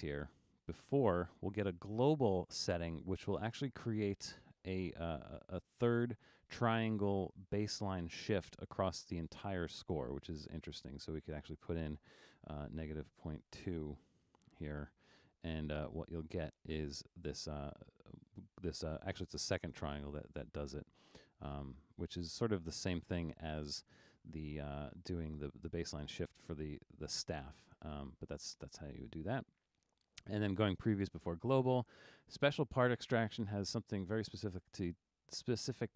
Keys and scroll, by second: 12.9-14.2 typing, 21.9 super+z.